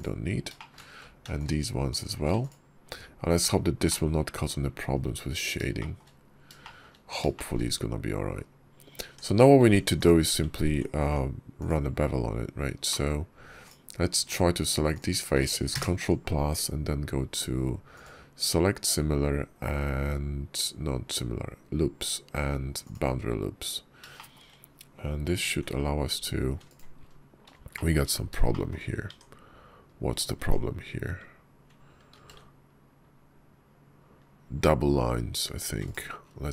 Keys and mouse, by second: 0.4 shift+click, 1.2 alt+shift+click, 1.8 alt+shift+click, 2.4 x, 3.7 click, 4.8 KP_5, 5.6-6.7 shift+middle drag, 7.2 shift+middle click, 8.9 Tab, 9.8 click, 10.8 Tab, 11.4 click, 12.7 shift+click, 14.8 shift+middle click, 15.6 ctrl+KP_Add, 17.8-22.8 middle drag, 24.0 shift+click, 25.3 ctrl+b, 27.6 shift+click, 28.4 shift+click, 29.0 Tab, 30.2 Tab, 32.1 ctrl+b.